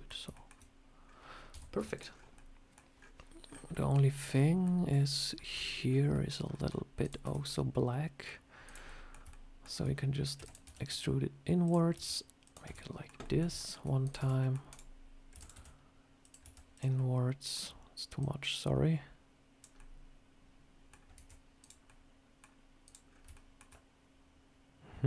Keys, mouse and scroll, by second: 0.2 shift+middle click, 0.9 scroll down 2, 1.4 Tab, 1.6 Tab, 1.8 click, 2.0-2.4 scroll down 4, 2.2 middle click, 2.9 scroll up 4, 6.4 middle click, 6.9 click, 7.1 Tab, 7.3 scroll up 3, 7.6 middle click, 8.5 click, 8.7 middle click, 9.2 shift+middle click, 10.2 e, 10.5 s, 11.8 e, 12.5 Tab, 12.6 middle click, 13.1 middle click, 13.5 shift+middle click, 13.5 shift+middle click, 13.9 click, 14.1 Tab, 14.3 middle click, 14.6 click, 15.2 e, 15.4 s, 16.3 e, 16.8 middle click, 18.1 click, 19.6 middle click, 21.0 Tab, 21.5 click, 21.7 middle click, 22.7 click, 23.0 scroll up 2, 23.2 shift+middle click, 23.6 middle click.